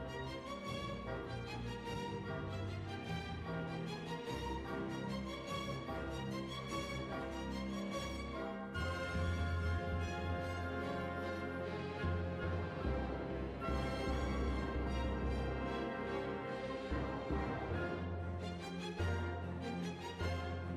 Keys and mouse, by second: 1.1-4.2 middle drag, 4.3 click, 4.3 right click, 5.1-6.6 right drag, 5.8 click, 6.6-8.5 middle drag, 9.0-11.1 drag, 14.2 KP_7, 14.4 Tab, 16.5-17.8 drag, 17.8 right click, 18.5-19.8 middle drag, 19.8 click, 20.5 click.